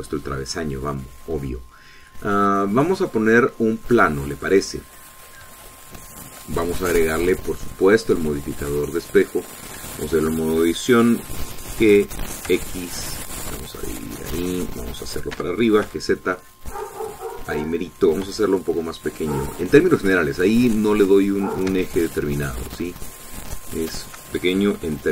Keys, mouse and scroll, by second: 5.2 click, 6.5 shift+middle click, 8.4 click, 8.7-10.1 middle drag, 10.1 click, 10.4 middle click, 10.8 Tab, 10.8-12.7 drag, 12.7 g, 13.4 x, 15.6 click, 16.3 g, 16.8 z, 18.4 click, 19.2 s, 21.1 click, 21.5 middle click, 22.3-23.4 shift+middle drag, 23.5 scroll up 2, 23.9-25.1 shift+middle drag.